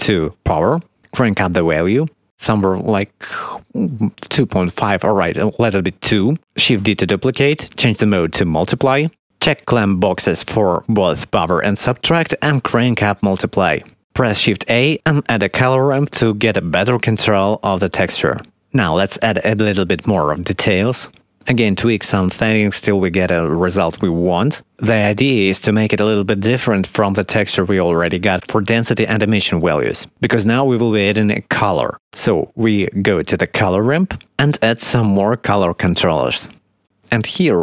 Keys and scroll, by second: 6.0 2, 7.2 shift+d, 12.4 2, 15.2 shift+a.